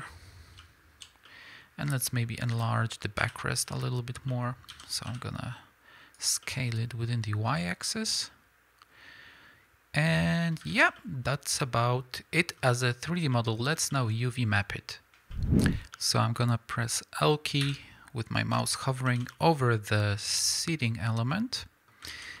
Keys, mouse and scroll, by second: 0.6 z, 2.5 ;, 3.2 l, 4.7 s, 6.2 click, 6.5-22.4 middle drag, 10.7 alt+a, 16.1-17.4 scroll up 2, 17.4 scroll up 1, 17.5 l, 19.0 shift+h, 20.9-21.2 scroll up 2, 22.0 alt+a.